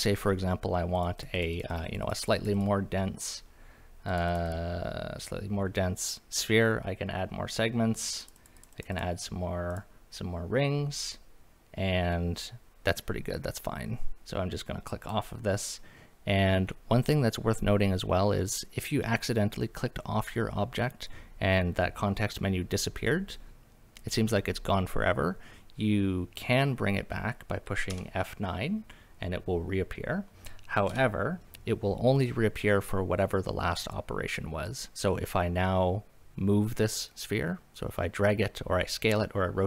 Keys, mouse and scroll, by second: 1.0 click, 1.2 click, 1.3 click, 1.5 click, 1.7 click, 1.8 click, 2.0 click, 2.2 click, 2.3 click, 2.5 click, 4.1 click, 4.3 click, 4.5 click, 8.2 click, 8.4 click, 8.6 click, 8.7 click, 8.9 click, 9.7 click, 15.0 click, 27.9 F9, 30.9 F9.